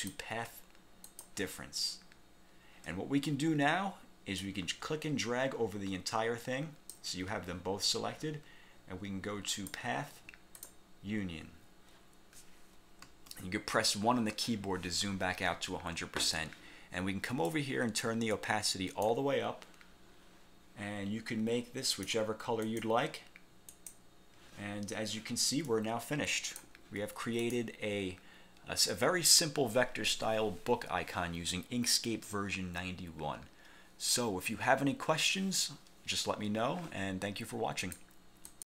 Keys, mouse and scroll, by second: 0.0 click, 1.2 click, 4.5-7.2 drag, 9.6 click, 10.7 click, 13.2 1, 17.6-19.4 drag, 22.0 click, 22.8 click, 23.8 click, 25.8 click, 27.5 click, 37.9 click, 38.6 click.